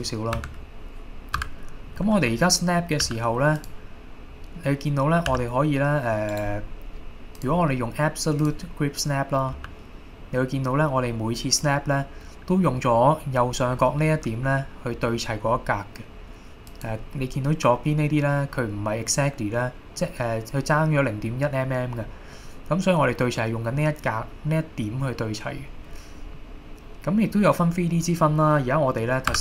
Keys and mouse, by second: 0.4 KP_1, 1.4 KP_7, 3.1 g, 3.6 click, 5.3 g, 6.3 right click, 7.5-8.7 drag, 9.6 g, 16.7 click, 26.4-28.7 middle drag, 29.3 KP_7.